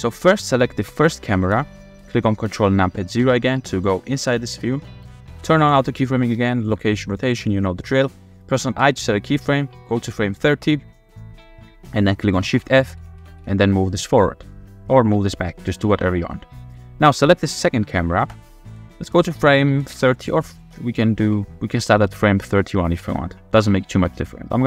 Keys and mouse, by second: 0.2-0.8 shift+drag, 1.4 click, 3.3 ctrl+KP_0, 7.1 click, 8.1 click, 8.9 i, 10.9 click, 12.4 shift+f, 13.2 w, 13.4 w, 15.4 click, 16.2 shift+click, 16.4 shift+click, 16.4-16.8 shift+middle drag, 18.4 click, 21.3 Right, 23.7 Left.